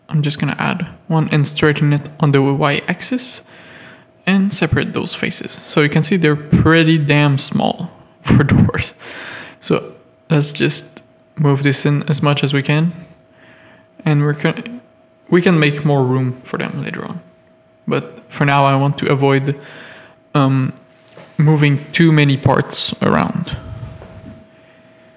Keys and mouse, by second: 1.5 3, 4.3 Tab, 4.5 alt+a, 6.8 click, 7.2 Tab, 7.6 1, 8.8 g, 10.2-11.7 drag, 11.9 alt+click, 12.6 Tab, 12.7 click, 13.4 alt+Tab, 15.9 ctrl+r, 17.9 Tab, 18.2 alt+a, 18.7 shift+middle click, 19.0 Tab, 19.4 ctrl+r, 21.0 Tab, 21.4 Tab, 21.8 ctrl+r, 23.3 Tab, 23.5 alt+a, 23.9 shift+middle click, 24.2 Tab, 24.6 z, 24.8 a.